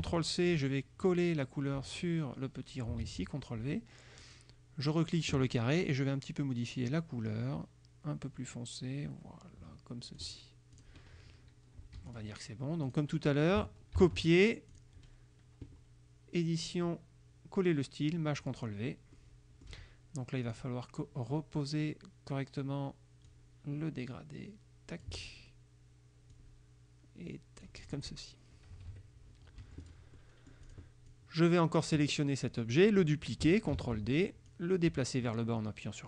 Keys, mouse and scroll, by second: 0.0 ctrl+c, 1.1 click, 3.1 ctrl+v, 4.3 click, 7.0-10.5 drag, 10.9 click, 12.1 F1, 12.2 click, 13.0 click, 14.1 ctrl+c, 14.8 click, 16.7 click, 18.5 click, 19.3 click, 20.5 click, 23.3-25.3 drag, 26.4-28.1 drag, 28.8 KP_Subtract, 29.8 F1, 29.9 click, 30.3 click, 31.2 click, 33.9 ctrl+d, 34.6-36.0 drag.